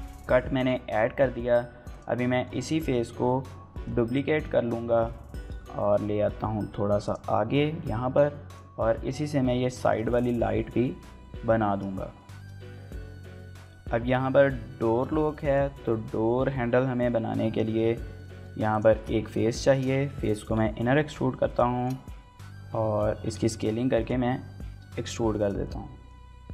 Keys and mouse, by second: 0.3 shift+middle click, 0.5 middle click, 1.2 middle click, 1.9 click, 2.4 shift+middle click, 2.6 middle click, 3.6 w, 4.3 shift+d, 6.3 y, 7.1 click, 7.3 middle click, 7.8 s, 8.5 click, 9.8 shift+middle click, 10.0 middle click, 10.4 KP_1, 11.3 shift+middle click, 11.5-13.2 typing, 12.9 shift+middle click, 13.5 Tab, 13.5 middle click, 14.9 shift+middle click, 15.1 middle click, 15.5 click, 15.7 Tab, 16.6 shift+middle click, 17.4 middle click, 18.2 shift+middle click, 18.7 click, 18.9 shift+middle click, 19.2 middle click, 19.7 shift+click, 21.5 click, 22.2 KP_1, 23.2 s, 23.3 z, 24.0 click, 24.6 s, 24.8 x, 25.4 click, 25.6 middle click, 26.3 e.